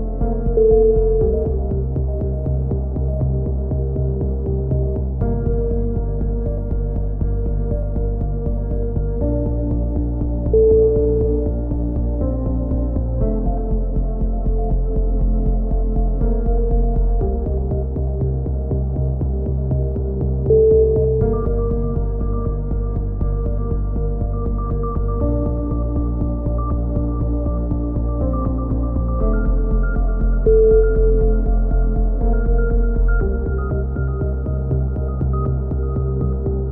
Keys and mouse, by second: 0.0-1.2 right drag, 1.2-4.2 middle drag, 3.7 z, 4.2 z, 4.7-6.2 right drag, 6.3-8.5 right drag, 8.2 click, 9.5 a, 11.0-12.2 middle drag, 12.8 middle click, 13.2 k, 16.2 click, 16.7 x, 18.3-19.4 middle drag, 19.4 z, 20.0 z, 21.1-22.7 drag, 23.0 middle click, 23.9 click, 24.5 middle click, 26.0-27.5 middle drag, 30.8-32.0 middle drag, 32.5-33.9 right drag, 33.1 click, 34.7 a, 35.1 k.